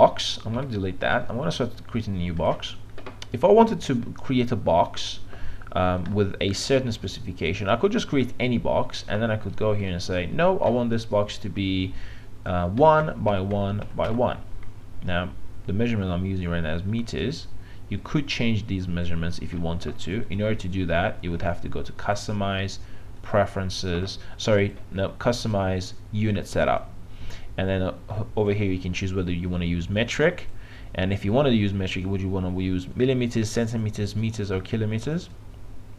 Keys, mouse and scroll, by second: 0.6 Delete, 2.4-11.1 drag, 12.8 KP_1, 13.0 Tab, 13.4 KP_1, 13.6 Tab, 13.9 KP_1, 14.1 Tab, 18.0-26.4 drag.